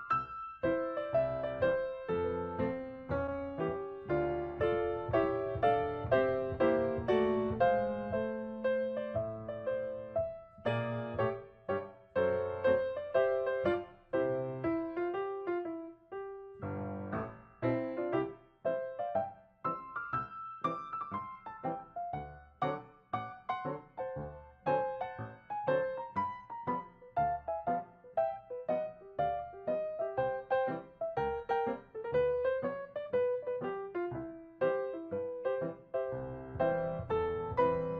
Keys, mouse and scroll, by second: 3.8 typing, 8.9 shift+scroll up 2, 9.3 scroll down 2, 10.0 double click, 10.1-12.7 typing, 11.8 double click, 13.5-14.2 shift+scroll up 7, 15.6-16.4 ctrl+scroll up 3, 16.4 space, 18.1 ctrl+scroll up 1, 20.2 ctrl+scroll up 1, 21.7 ctrl+scroll down 1, 22.6 space, 23.0 ctrl+scroll down 2, 25.3 ctrl+click, 29.3 typing, 29.9 ctrl+click, 32.0 ctrl+click, 34.3 ctrl+click, 37.4-37.9 typing.